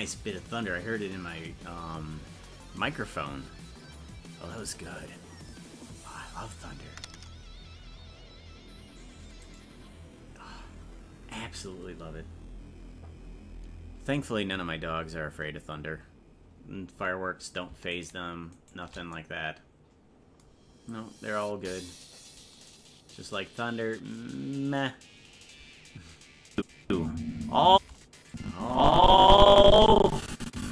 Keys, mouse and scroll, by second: 9.5-14.4 right drag, 18.0 shift+right click, 26.5 click, 26.8 space, 28.3-30.7 drag.